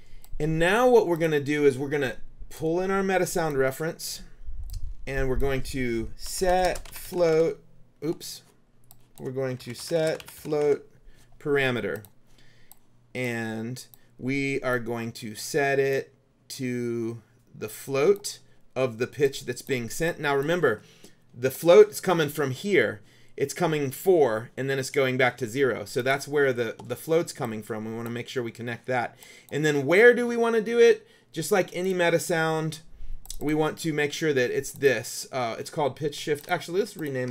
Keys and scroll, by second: 6.1-7.9 typing, 9.5-11.3 typing.